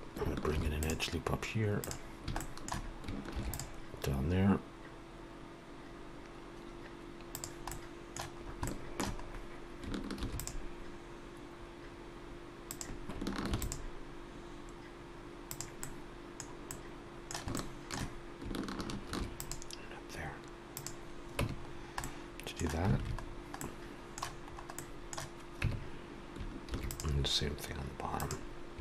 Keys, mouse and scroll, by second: 0.4 ctrl+r, 2.3 shift+middle click, 3.1 ctrl+r, 7.6 middle click, 8.4 scroll up 1, 8.6 shift+middle click, 9.2 scroll up 1, 10.1 ctrl+r, 13.4 ctrl+r, 15.8 middle click, 16.6 middle click, 17.5 shift+middle click, 17.6 shift+middle click, 19.0 ctrl+r, 21.3 Tab, 21.7-22.0 scroll down 3, 22.0 middle click, 22.9 alt+a, 23.2 scroll down 2, 23.5 middle click, 24.4-25.4 scroll up 2, 24.7 middle click, 25.6 Tab, 26.6 ctrl+r.